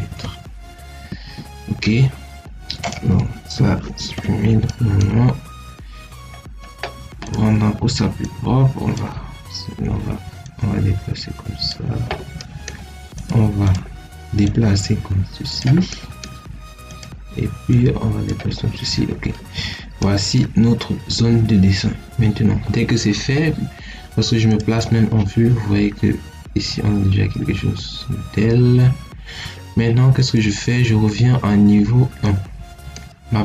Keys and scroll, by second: 0.1 Return, 3.9 ctrl+x, 18.4 Escape.